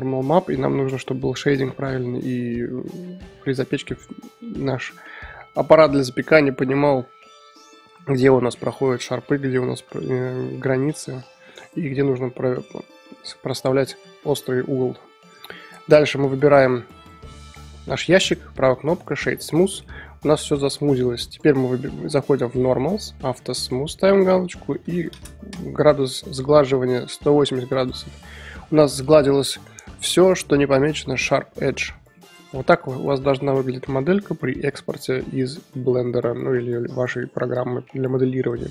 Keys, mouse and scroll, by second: 3.7-11.0 middle drag, 11.8-15.8 middle drag, 15.8 Tab, 17.0-19.8 right drag, 19.8-21.2 middle drag, 21.2 click, 22.4-23.6 drag, 24.1-26.6 drag, 26.6-27.7 middle drag, 27.7 click, 28.1-28.7 middle drag, 28.7 click, 28.9-32.2 middle drag, 32.2 click, 32.5-38.4 middle drag, 38.4 click, 38.6-38.7 drag.